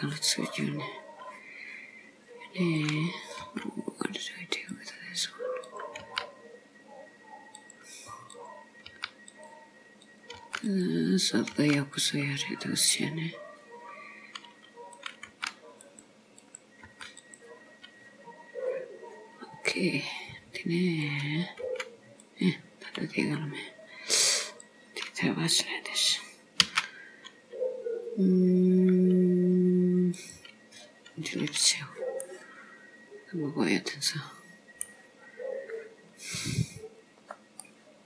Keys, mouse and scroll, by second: 2.8 click, 3.5 g, 5.7 click, 6.2 g, 8.5 click, 9.0 g, 10.1 click, 10.4 g, 11.3 click, 11.6 g, 15.0 click, 15.4 g, 16.4 click, 16.9 g, 17.8-18.2 scroll down 2, 21.1 click, 21.7 g, 23.2 scroll up 3, 24.5 click, 26.7 x, 31.5-32.3 scroll down 2, 32.3 middle click, 35.4-36.1 scroll up 1, 36.1-37.6 scroll down 1, 37.6 scroll down 2, 37.7 middle click.